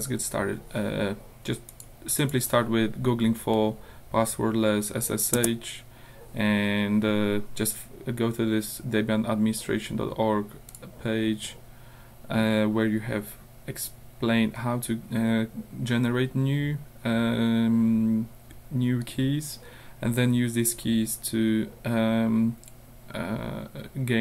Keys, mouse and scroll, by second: 1.7 click, 2.2 click, 5.4 Return, 10.7 click, 14.7 scroll down 2, 19.2 scroll down 2, 20.5-21.0 scroll down 2, 21.4 scroll down 2.